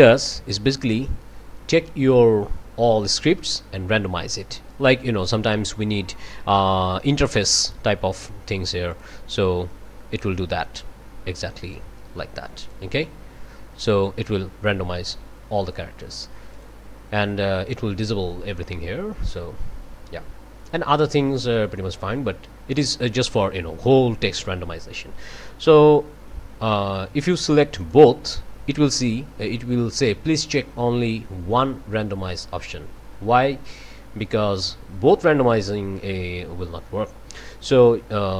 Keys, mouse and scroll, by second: 5.5 click, 8.9 click, 9.7-11.9 drag, 12.6 click, 13.8 click, 16.5 click, 19.2 click, 27.8-28.1 scroll up 1.